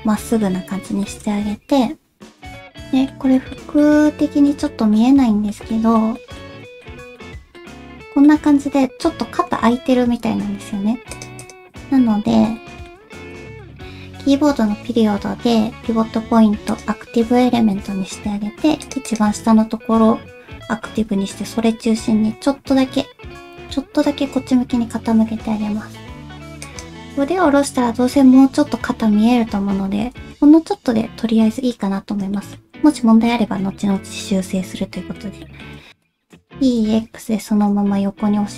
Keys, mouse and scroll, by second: 1.2 shift+middle click, 2.2 alt+z, 2.2 KP_1, 2.2 shift+middle click, 12.7 middle click, 17.5 KP_1, 20.9 r, 23.6 r, 30.1 alt+z, 30.7 middle click, 30.7 scroll up 1, 32.3 shift+middle click, 32.3 shift+scroll up 1, 32.6-33.1 shift+scroll down 1, 33.2 KP_1, 34.2 middle click, 35.4 middle click, 36.4 e.